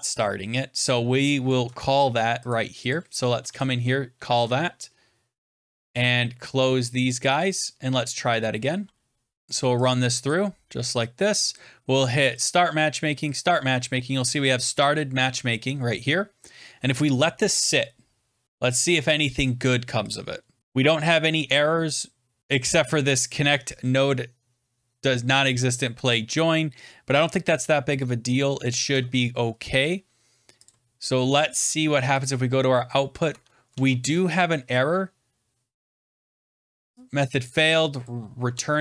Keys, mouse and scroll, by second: 0.2 scroll, 1.4 click, 1.8 ctrl+c, 2.4 click, 2.6 scroll down 3, 2.8 click, 3.2 Return, 3.4 ctrl+v, 4.3 alt+Tab, 5.6 click, 5.8 alt+Tab, 6.5 click, 7.5 click, 8.3 click, 10.2 click, 11.5 click, 12.3 click, 13.2 click, 20.0 click, 20.6 click, 20.6-21.0 scroll down 10, 22.4 click, 23.9 click, 28.9 alt+Tab, 29.0 alt+Tab, 30.6 click, 32.1 click, 33.2 alt+Tab, 33.6 alt+Tab, 37.9 click, 38.4 alt+Tab.